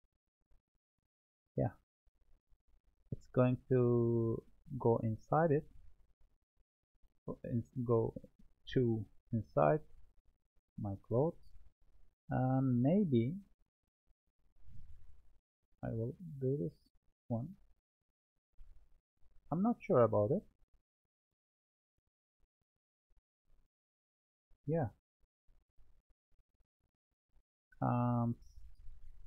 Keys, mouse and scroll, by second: 6.6-9.7 middle drag, 10.2-12.6 drag, 12.6-13.8 scroll up 12, 13.8-14.6 scroll up 2, 14.6-20.8 drag, 28.2-29.2 drag.